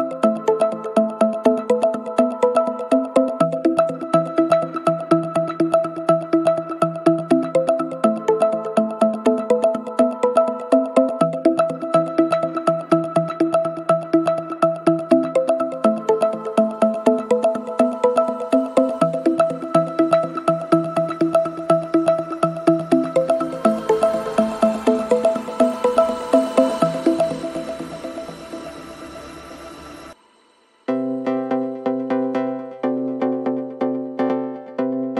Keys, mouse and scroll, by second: 0.9-3.2 typing, 6.4 click, 8.1 right click, 10.2 click, 11.4-13.0 typing, 14.6 click, 16.6 click, 17.5 click, 17.8-19.7 typing, 20.7 click, 20.9 click, 24.5 click, 25.5 click, 28.3 click, 33.4 click, 34.8 click.